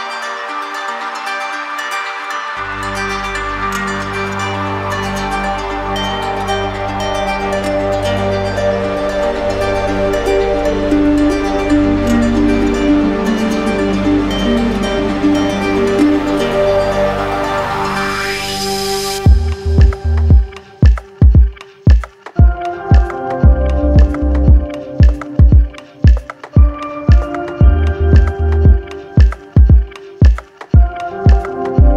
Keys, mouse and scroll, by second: 0.0 click, 0.5 shift+click, 1.7 alt+click, 2.9 alt+click, 3.8 alt+click, 6.2 click, 8.5 click, 9.6 click, 10.3 click, 11.3 alt+click, 11.5 alt+click, 13.7 click, 15.1 click, 17.0 click, 17.5 click, 18.2 click, 20.0 click, 20.4 shift+click, 21.7 click, 23.7 alt+click, 31.7 alt+click.